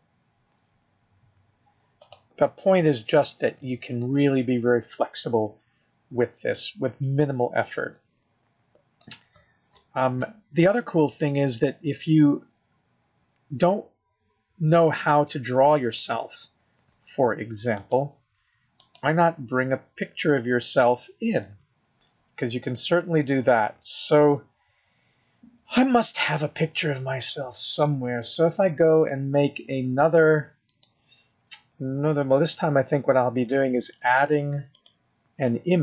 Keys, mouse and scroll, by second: 0.7 g, 4.0-4.5 scroll down 1, 4.5 scroll up 2, 5.9 scroll down 1, 7.9 shift+middle click, 17.8 click, 30.7 click, 34.8 click.